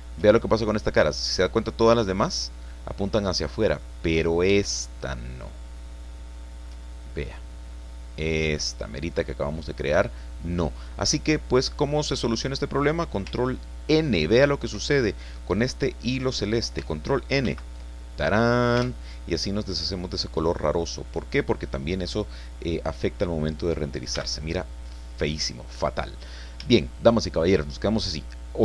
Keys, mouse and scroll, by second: 0.9-1.2 scroll down 2, 1.5-4.0 drag, 4.1-4.5 scroll up 2, 4.5-6.8 shift+middle drag, 7.7-8.8 drag, 17.4 ctrl+n, 18.2-18.5 ctrl+scroll down 3, 18.7 Tab, 19.3 click, 21.0-21.3 scroll down 1, 22.1-22.4 scroll down 1, 24.1 n, 24.8-25.1 scroll down 2, 25.1-26.3 drag, 26.7 shift+click.